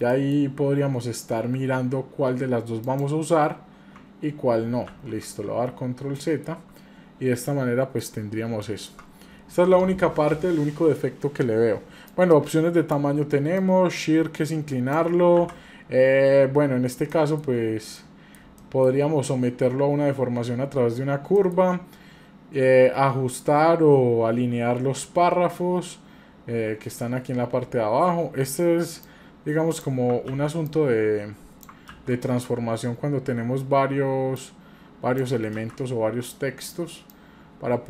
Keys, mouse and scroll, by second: 0.1 shift+middle click, 2.9 click, 4.9 ctrl+z, 6.2 shift+middle click, 7.2-7.5 scroll down 1, 7.5-8.0 middle drag, 8.2-8.5 scroll up 1, 8.6 shift+middle click, 12.1 click, 13.6-15.0 drag, 15.4 ctrl+z, 17.1 shift+middle click, 18.0-18.4 middle drag, 18.6 shift+middle click, 21.3 shift+middle click, 22.0-22.8 scroll down 1, 24.4 scroll down 2, 29.0 click, 30.3 ctrl+z, 30.7 click, 31.9 ctrl+z, 34.4 click, 35.6 ctrl+z, 37.1 click.